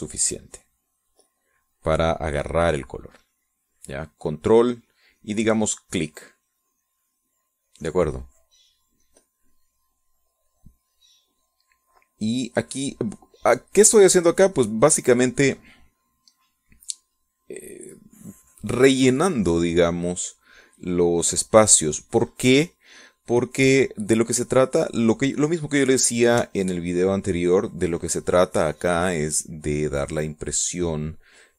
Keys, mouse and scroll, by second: 8.3 click, 9.9-23.0 drag, 23.4-27.2 drag, 27.4-31.5 ctrl+drag.